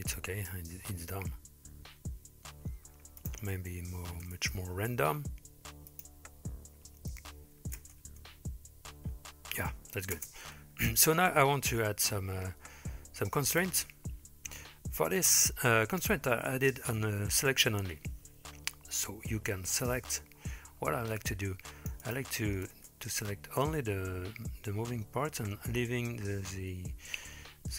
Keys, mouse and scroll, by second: 3.3-4.5 drag, 5.9 click, 7.8 space, 10.2 space, 10.8-11.2 scroll down 3, 12.2-13.3 scroll down 3, 15.2-16.0 drag, 17.0 KP_1, 17.5 KP_3, 20.0 c, 22.8 space, 23.7 space.